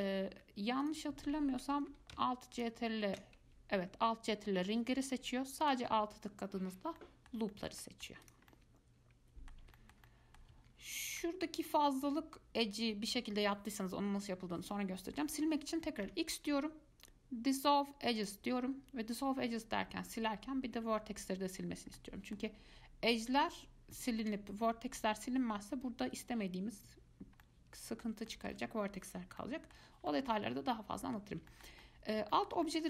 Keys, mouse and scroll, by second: 1.0 click, 2.7 ctrl+alt+click, 5.3 click, 5.8 alt+click, 7.2-8.4 middle drag, 8.4 click, 8.7-11.8 middle drag, 11.8 alt+click, 16.3 x, 22.2-24.4 middle drag, 24.4 1, 27.6-32.8 middle drag.